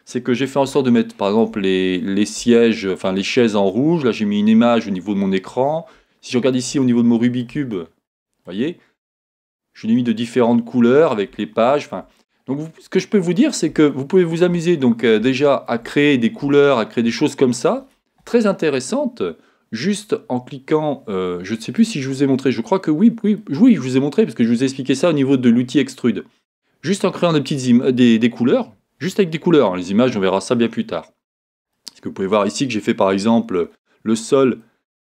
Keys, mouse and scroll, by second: 1.9 scroll up 2, 5.1-5.5 scroll down 2, 8.8-9.5 scroll up 2, 12.4 scroll down 1, 14.5 shift+scroll up 1, 14.8 scroll down 1, 23.5 scroll up 1, 31.7-35.0 middle drag.